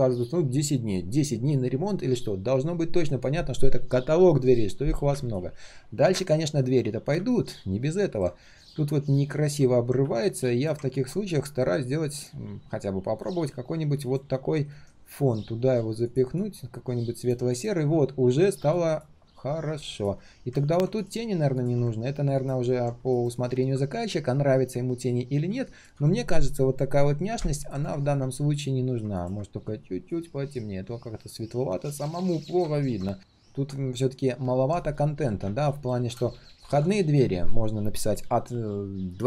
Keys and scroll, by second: 14.7 ctrl+shift+[.